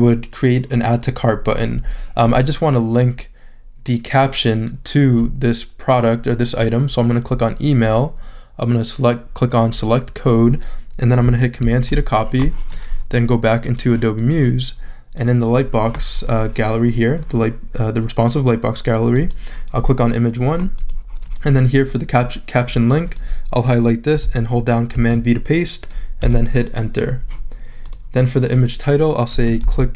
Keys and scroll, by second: 11.6 super+c, 24.9 super+v, 26.2 Return, 29.6-29.9 typing.